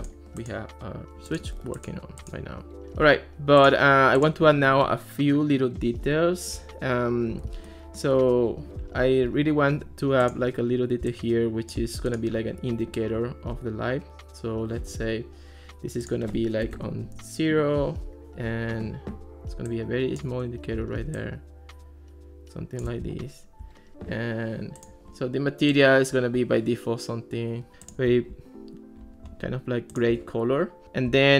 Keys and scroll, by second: 16.7 0, 16.8 Return.